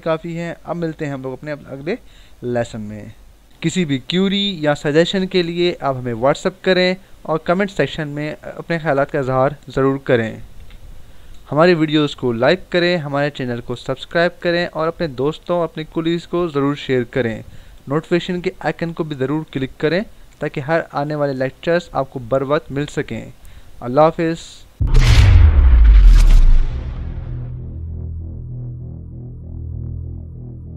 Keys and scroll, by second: 10.6 Right.